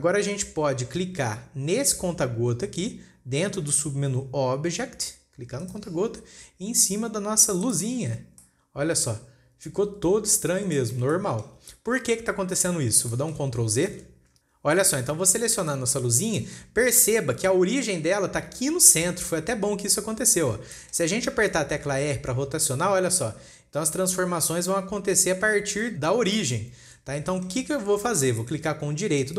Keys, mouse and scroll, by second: 0.3-0.9 scroll down 1, 0.9-4.0 scroll down 1, 6.0 click, 8.7 scroll down 2, 8.9-11.0 middle drag, 11.0 scroll up 1, 11.2-13.2 shift+middle drag, 13.2 scroll up 2, 13.7 shift+middle click, 14.5 ctrl+z, 14.7-15.1 scroll down 1, 15.1-15.5 shift+middle drag, 15.5 scroll up 3, 16.1 click, 16.8-19.9 shift+middle drag, 19.9-20.6 scroll down 3, 20.6-21.1 scroll up 2, 21.1-22.1 shift+middle drag, 22.1 r, 27.0 ctrl+z, 27.3-27.7 scroll up 3, 27.7-29.3 shift+middle drag.